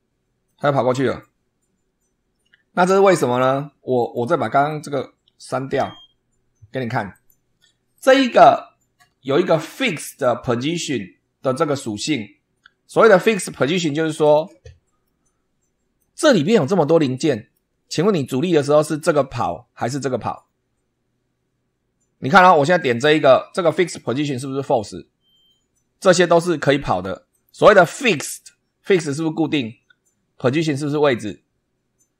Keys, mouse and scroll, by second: 0.4 middle click, 3.9 click, 4.6 click, 5.7 Delete, 7.0 click, 7.9 click, 14.1 click, 14.9 middle click, 15.3-15.7 drag, 15.7 middle click, 16.2 scroll down 1, 17.1 middle click, 22.8 click, 27.2 click, 28.1 click.